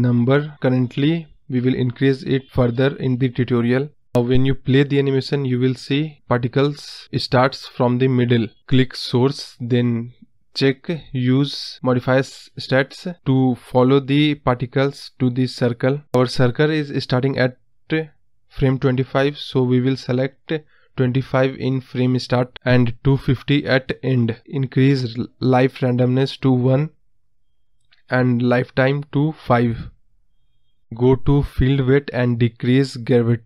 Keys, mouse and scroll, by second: 7.7-8.3 drag, 8.3 space, 8.5-9.6 scroll up 5, 9.6 middle drag, 9.9-10.5 scroll up 3, 10.6-10.9 scroll down 4, 10.9 space, 12.6 click, 12.9-13.7 scroll down 1, 13.7 click, 13.9 space, 16.4 space, 18.9-20.4 drag, 20.4 space, 23.4-29.4 drag, 29.6 scroll down 1, 30.2-32.0 scroll down 11, 32.1-33.4 drag.